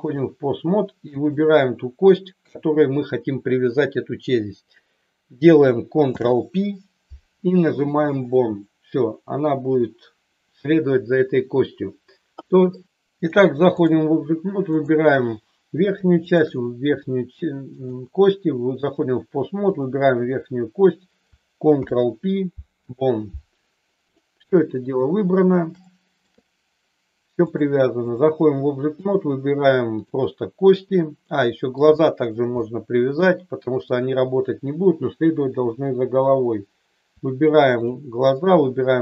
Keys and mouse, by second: 6.0 ctrl+p, 12.4 click, 13.3 click, 14.7 click, 16.2 shift+click, 17.8-19.0 drag, 19.7 click, 21.7 ctrl+p, 25.8 shift+middle click, 27.5-28.1 drag, 28.9 click, 29.9 click, 31.3-31.7 middle drag, 31.9-32.3 shift+middle drag, 32.5-33.1 middle drag, 33.9 click.